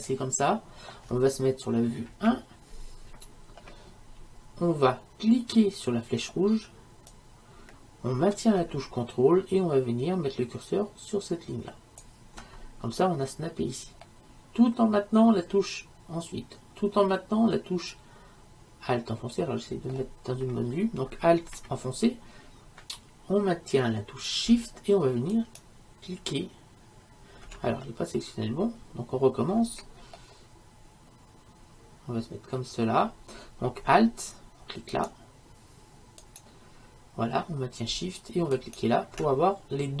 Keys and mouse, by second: 2.1 KP_1, 14.1-16.0 middle drag, 25.4-27.2 right drag, 27.2-35.0 middle drag, 35.0-40.0 right drag.